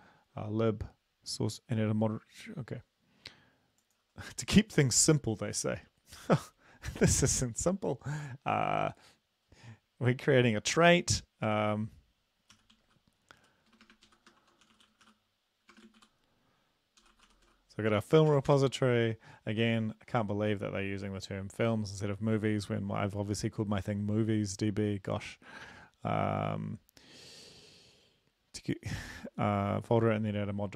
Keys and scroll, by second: 12.6-16.0 typing, 17.0 typing, 18.3 typing, 18.5 Return.